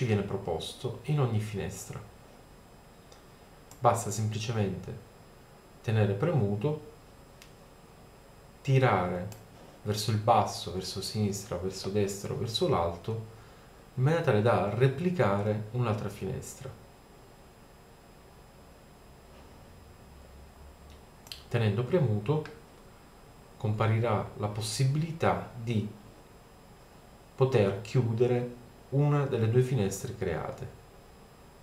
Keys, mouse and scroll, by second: 3.7-5.0 middle drag, 5.7 middle click, 19.1 middle click, 21.3-23.1 drag.